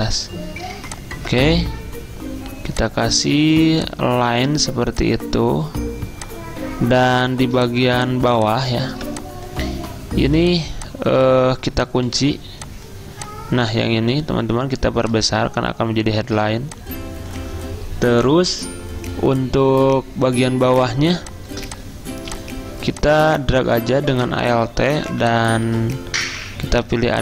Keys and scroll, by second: 7.9 typing, 9.0 typing, 12.1 ctrl+2, 21.2 t.